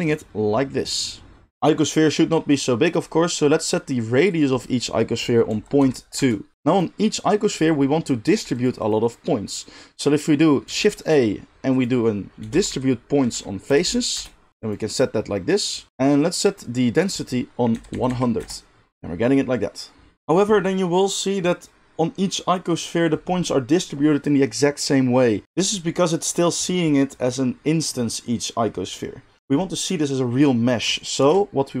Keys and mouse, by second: 8.2 g, 8.6 middle click, 8.7 click, 8.9-15.9 middle drag, 10.6 shift+a, 13.8 Down, 15.9-31.8 drag, 18.0 0.